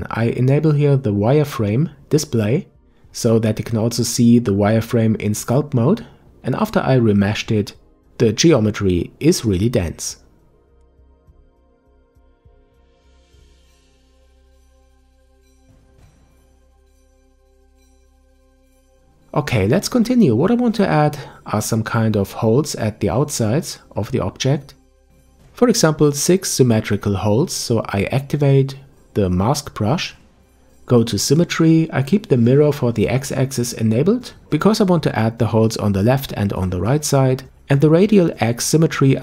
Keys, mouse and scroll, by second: 3.1-9.1 drag, 10.1-11.2 middle drag, 11.2-11.8 scroll down 2, 11.8-12.4 scroll up 1, 12.4-15.1 scroll up 2, 15.1-17.1 drag, 17.1-17.6 scroll down 1, 17.6-20.2 middle drag, 20.2 ctrl+s, 20.9-22.4 middle drag, 22.4 KP_5, 25.6 click, 28.7 click, 31.9 click, 33.0-33.6 scroll down 1, 33.6-34.6 scroll down 2, 34.6-37.6 drag.